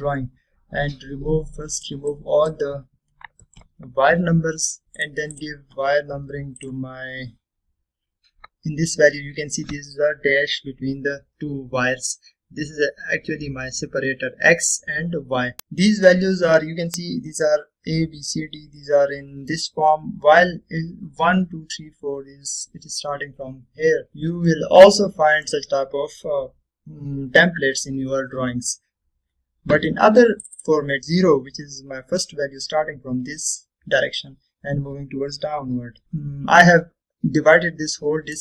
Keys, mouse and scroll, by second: 1.4 scroll down 1, 2.8-3.7 drag, 5.0 Return, 6.1 click, 8.6-9.0 scroll up 1, 15.6-16.9 scroll down 2, 19.9-20.8 middle drag, 25.6-26.7 middle drag, 31.0-31.3 scroll down 1, 31.3-31.6 scroll up 1, 36.0 click.